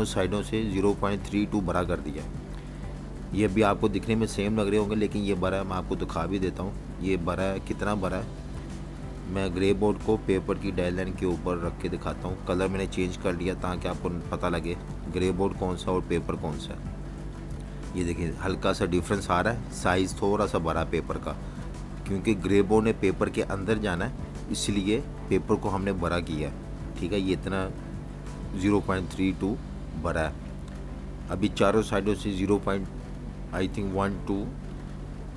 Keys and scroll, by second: 1.2 v, 1.5 space, 4.2 alt+super+2, 6.3 super+g, 17.2-17.5 typing, 18.6-19.1 typing, 22.1-24.0 typing, 24.9 Up, 25.1 Up, 25.2 Up, 25.4 Up, 25.5 Up, 25.7 Up, 25.9 Up, 26.2 Up, 26.4 Up, 26.6 Up, 26.7 Up, 27.5 Up, 27.9 Page_Up, 29.0-29.8 typing, 32.7 typing, 33.1 super+-, 33.2 super+-, 35.2 v.